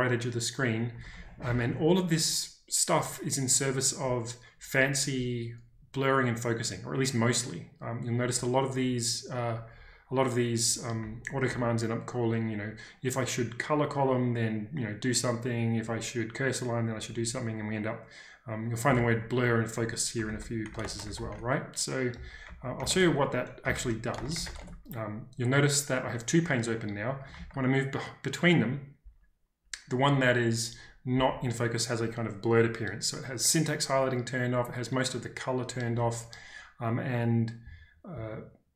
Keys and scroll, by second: 0.9-1.4 typing, 9.5 typing, 11.0-11.4 typing, 16.8 typing, 18.8-24.9 typing, 27.3 ctrl+k.